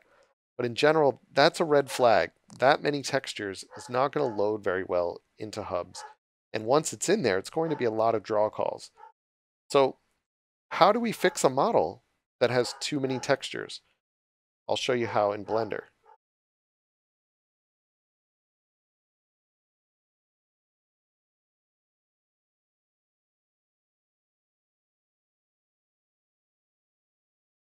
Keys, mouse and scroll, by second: 0.9 click, 2.1-2.4 scroll down 1, 3.0 click, 5.8 scroll up 1, 6.6 click, 10.0 scroll up 1.